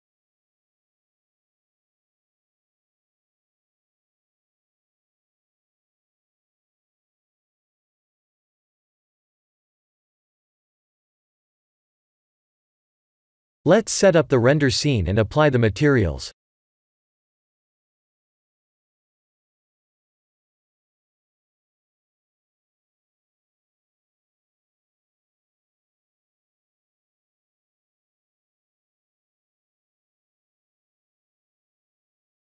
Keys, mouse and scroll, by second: 2.5 click, 3.6 click, 4.3-4.8 scroll down 3, 4.8-5.5 scroll up 1, 5.5 click, 5.5-6.6 scroll up 1, 6.6 click, 7.6-8.9 scroll down 5, 8.9 click, 10.0 click, 10.9-11.8 scroll down 6, 11.8-13.1 scroll up 14, 13.9 click, 15.1 click, 16.4 click, 17.4 click, 21.7 click, 26.2 middle click, 27.0 middle click, 28.5 click, 31.1 click.